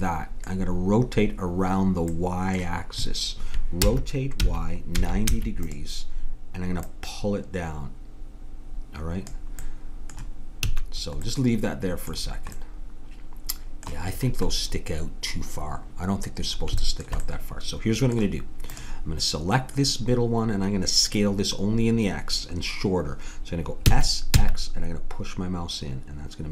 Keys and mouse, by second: 3.9 r, 6.8-8.5 drag, 10.7 a, 18.7-20.5 drag, 23.9 s.